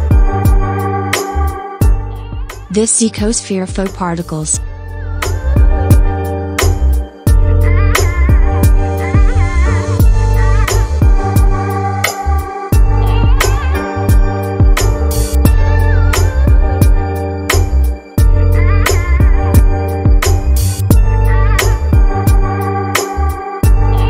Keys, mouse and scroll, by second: 5.3-10.2 drag, 11.8 s, 13.0-14.0 scroll down 5, 14.0 g, 15.2 scroll up 4, 15.4-15.8 scroll down 3, 15.8 scroll up 1, 16.0 scroll down 1, 16.7-18.0 drag, 18.4 s, 18.7 s, 19.9 scroll up 2, 20.2 shift+middle click, 20.9 scroll up 1, 21.1-22.2 shift+middle drag, 22.2 s.